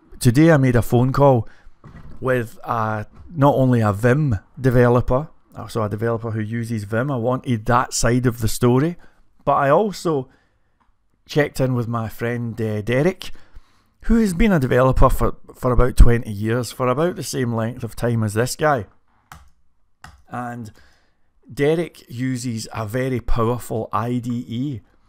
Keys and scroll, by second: 18.4-23.0 typing.